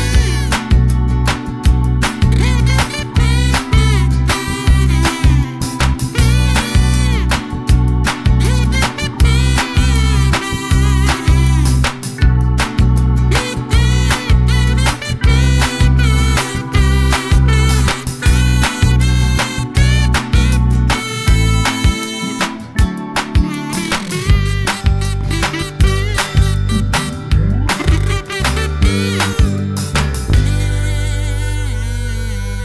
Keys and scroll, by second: 10.6 super+d, 13.6 super+z, 19.7 super+z, 29.5 Up, 29.6 Up.